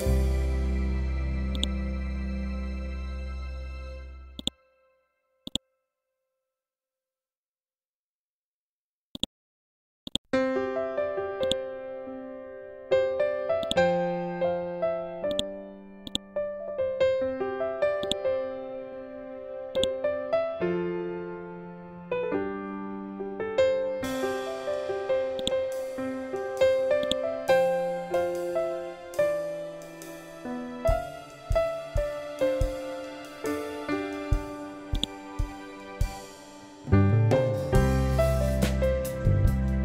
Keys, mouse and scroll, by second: 1.4-8.9 drag, 9.0-15.2 drag, 22.9 F12, 25.3 right click, 26.9 click, 28.8 F12, 30.7-31.5 typing, 32.1 Return, 34.9 right click, 37.5 F12, 38.0 Tab, 38.4 2.